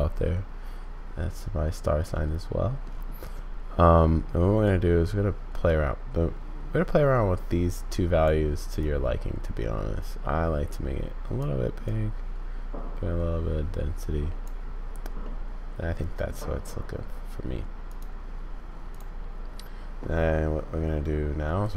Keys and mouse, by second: 2.1 middle click, 4.6-8.2 drag, 8.8-11.4 drag, 11.8-14.4 drag, 15.3 click, 17.9 click.